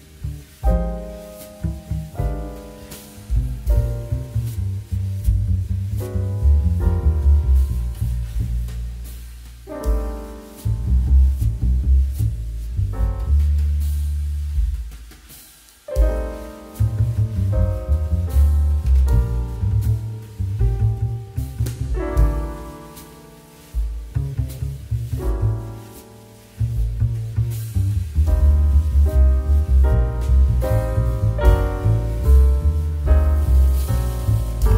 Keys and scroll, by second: 3.6 2, 9.1 2.